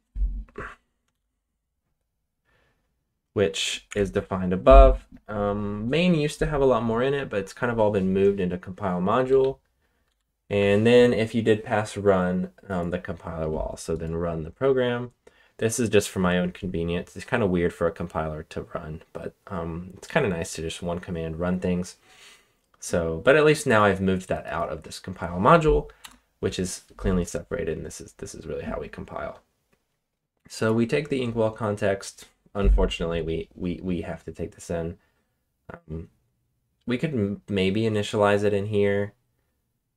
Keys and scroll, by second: 1.1 shift+k, 3.8 Escape, 9.2 j, 10.0 k, 10.4 j, 26.0 Return.